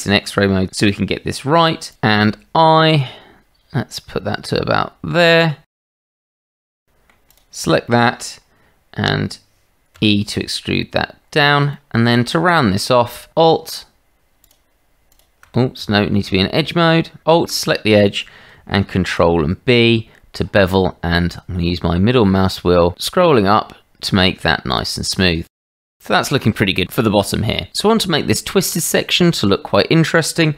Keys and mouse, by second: 2.3 i, 6.3 click, 6.7 shift+z, 6.8 click, 7.3 click, 7.9 click, 9.9 e, 11.7 click, 14.4 alt+click, 15.8 Tab, 19.0 ctrl+b, 25.6 click, 25.8 Tab.